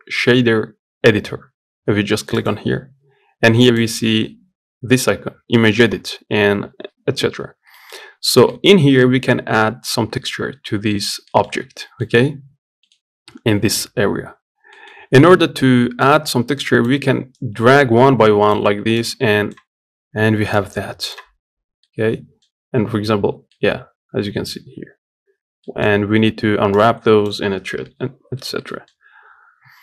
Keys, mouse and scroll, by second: 9.7-10.7 scroll up 1, 10.7-11.0 scroll up 1, 11.0 middle click, 11.2-11.5 scroll down 2, 11.5-21.1 middle drag, 21.1-21.5 scroll up 2, 21.5-24.3 middle drag, 24.3-25.0 scroll up 2, 25.0-25.4 scroll down 1, 25.4-28.1 middle drag, 28.1-28.4 scroll up 1, 28.4 middle click, 28.7-29.8 scroll down 1.